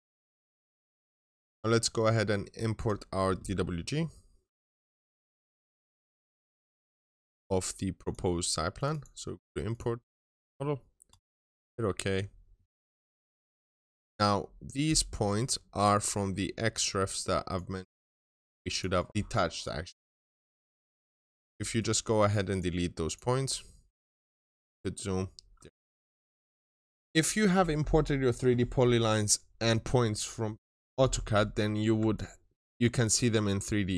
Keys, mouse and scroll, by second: 0.4 click, 8.8 double click, 9.5 click, 13.4 double click, 13.9 click, 15.0 middle click, 17.3 click, 17.6 right click, 18.3 click, 18.6 double click, 19.1 right click, 19.4 click, 21.3 right click, 21.9 click, 22.3 double click, 22.9 click, 23.3 right click, 24.1 click, 25.8-27.1 ctrl+shift+middle drag, 25.9 ctrl+shift+click, 27.1 scroll up 1, 31.5 scroll down 1, 31.8-33.9 middle drag, 32.0 ctrl+shift+click.